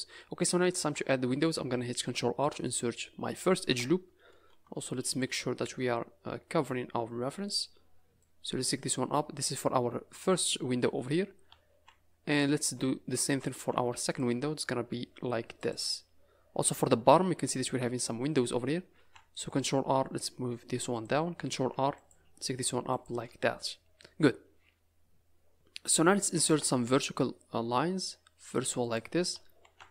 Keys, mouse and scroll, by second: 0.7 ctrl+r, 3.6 KP_0, 4.6 z, 5.5-6.6 scroll down 12, 6.9 scroll up 4, 8.2 click, 11.0 scroll up 3, 11.7 ctrl+r, 12.6 scroll down 5, 13.5 ctrl+r, 16.4-18.7 scroll up 7, 18.9 ctrl+r, 21.5 ctrl+r, 23.5-23.9 scroll down 4, 23.9 scroll up 2, 26.4 ctrl+r, 29.6 ctrl+r.